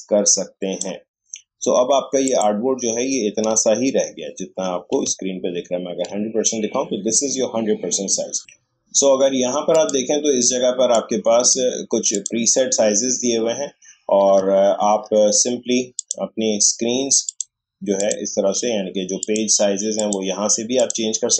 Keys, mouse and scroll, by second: 3.5 space, 3.8-4.5 scroll up 2, 4.0 space, 4.5 space, 5.5-6.0 alt+scroll up 1, 8.4-9.7 scroll up 1, 9.7 click, 14.3 alt+scroll down 1, 15.9 click, 17.0 click.